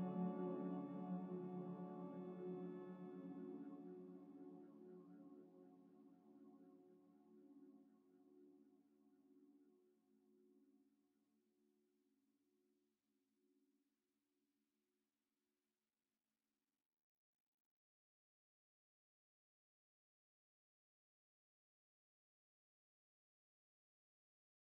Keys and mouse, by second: 3.1 click, 4.1 click, 5.2 click, 6.5 click, 7.9 click, 13.2-14.9 drag, 17.6 super+d, 17.6-24.6 drag.